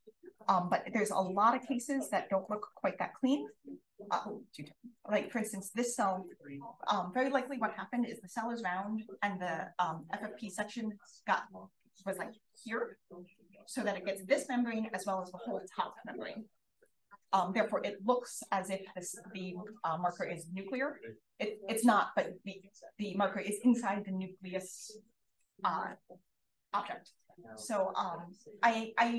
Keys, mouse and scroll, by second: 0.3 click, 0.8-2.4 typing, 0.9-1.2 scroll up 1, 1.2 click, 1.5 middle click, 2.0-2.4 drag, 2.4-3.6 middle drag, 3.6-4.0 scroll up 1, 4.0-4.4 scroll down 2, 4.4-5.2 scroll up 2, 5.2 click, 5.4-6.9 scroll up 6, 5.7 click, 5.9 click, 6.9-8.4 scroll up 1, 8.4-10.8 scroll up 1, 10.8-11.4 scroll up 1, 11.4-12.0 scroll up 1, 12.0-12.7 scroll up 1, 12.7-14.3 scroll up 1, 14.3-17.3 scroll up 1, 17.3-22.2 scroll up 1, 22.2-29.1 scroll up 1.